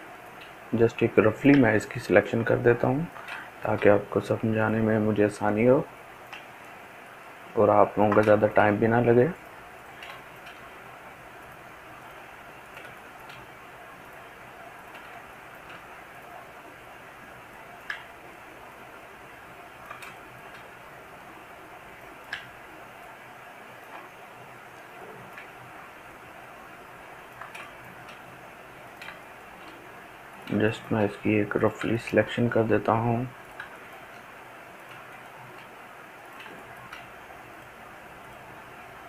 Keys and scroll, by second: 5.3 ctrl+z.